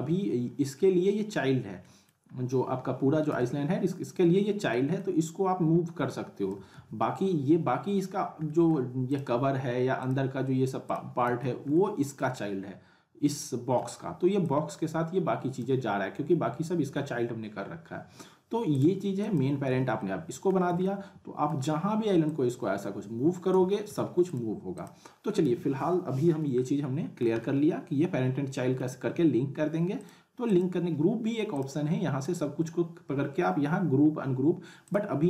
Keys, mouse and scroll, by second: 1.8 middle click, 2.3-2.9 scroll down 1, 3.3 z, 4.2 scroll down 1, 4.7 alt+middle click, 6.1-6.7 click, 6.7 ctrl+z, 8.4 alt+middle click, 9.1 click, 11.2 z, 11.7-12.3 alt+middle click, 12.3-13.3 scroll down 1, 13.4-14.0 alt+middle click, 14.4-15.7 drag, 15.8 scroll down 1, 18.7 click, 19.7 z, 20.0-20.6 middle click, 20.6 scroll down 1, 20.8-21.8 alt+middle drag, 22.2-23.8 drag, 23.8 ctrl+z, 24.3 click, 25.4 z, 25.9-26.5 alt+middle drag, 30.1 click, 34.8 click, 34.9 click.